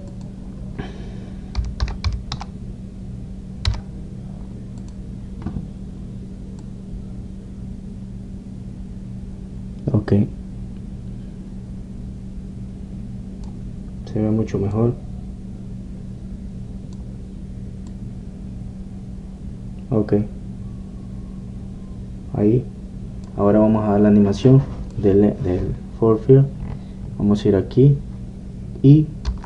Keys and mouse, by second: 1.2-9.6 drag, 15.8-17.7 drag, 19.1-23.6 drag, 25.6-29.4 drag.